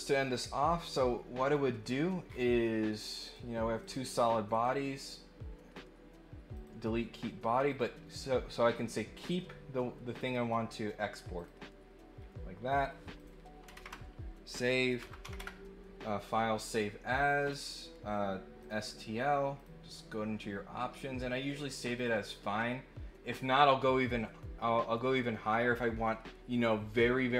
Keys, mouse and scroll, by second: 0.3 scroll down 2, 2.2 scroll up 2, 3.2 click, 3.8 click, 4.5 click, 5.0 right click, 6.5 click, 7.6 click, 10.1 click, 11.4 click, 12.1 middle click, 13.1 click, 17.4 click, 18.6 click, 19.5 click, 21.9 click.